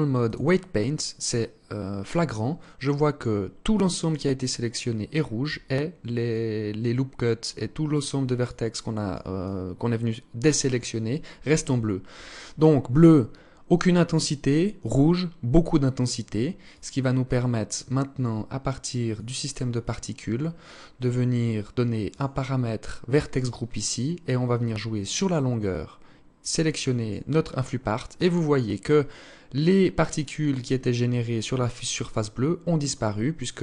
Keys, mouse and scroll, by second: 0.1 scroll down 2, 0.7 scroll up 2, 1.2 scroll down 1, 4.7 alt+click, 7.6 alt+click, 8.6 alt+click, 10.2 alt+click, 16.8 click, 18.3 click, 19.4 scroll down 6, 21.3 click, 21.8 scroll down 3, 24.3 click.